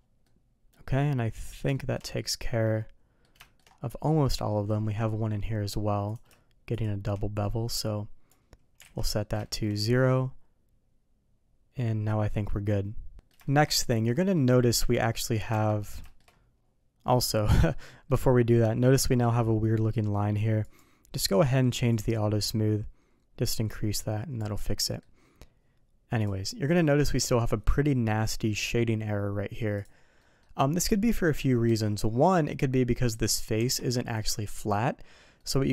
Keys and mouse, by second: 0.2 middle click, 0.9 middle click, 1.7 shift+middle click, 2.1-3.2 middle drag, 3.4 shift+middle drag, 3.9-4.4 middle drag, 6.7 shift+click, 7.7 click, 8.8 alt+a, 9.0 middle click, 9.4 middle click, 10.0-12.2 middle drag, 12.5 middle click, 13.1 alt+a, 13.1 ctrl+s, 13.1 middle click, 13.4 shift+middle drag, 14.1 middle drag, 14.8 Tab, 15.1 middle click, 15.5 Tab, 15.8 middle click, 16.0 shift+middle drag, 17.3 middle drag, 17.7 middle click, 18.1 middle click, 20.7 click, 21.9-24.5 drag, 24.8 middle click, 26.8 shift+middle drag, 29.7 click, 30.2 middle click, 32.4 middle drag, 33.2 click, 33.6 Tab, 34.1 click, 35.4 middle click.